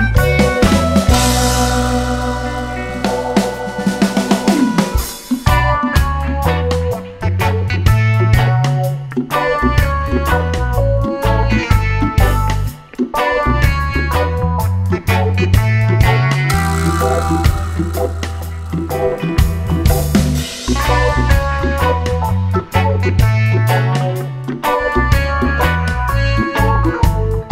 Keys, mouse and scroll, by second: 1.1 click, 2.6 click, 3.7 click, 4.8 click, 5.9 click, 6.5 click, 7.5 click, 9.1 click, 10.2 click, 10.7 click, 11.6 click, 15.1-18.1 right drag, 22.3 click, 24.4 click.